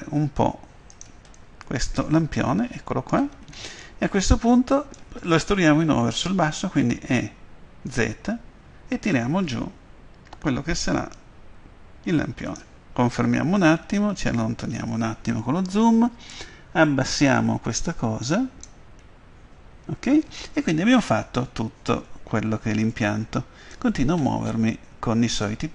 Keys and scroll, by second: 6.7-8.9 typing.